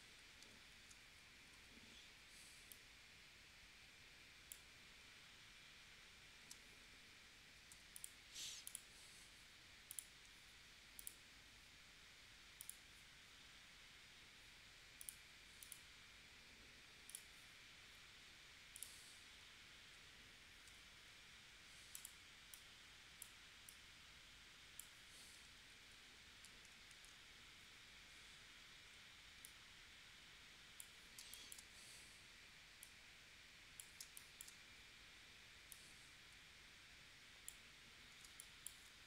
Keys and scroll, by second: 0.7 shift+w, 6.4 super+z, 20.7 a, 25.5 super+z, 26.9 shift+w, 31.2 space, 34.0 space, 38.2 space.